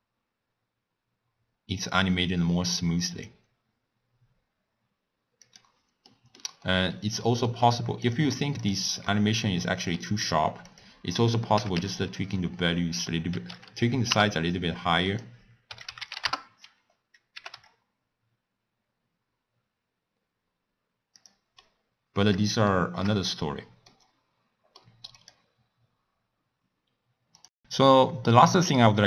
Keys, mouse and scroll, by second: 6.1-8.0 middle drag, 8.0 click, 9.1-10.7 middle drag, 10.7-13.7 drag, 15.1-17.4 drag, 17.4 g, 21.6-23.2 middle drag, 23.2-23.9 scroll up 6, 23.9-25.1 middle drag, 25.1 click.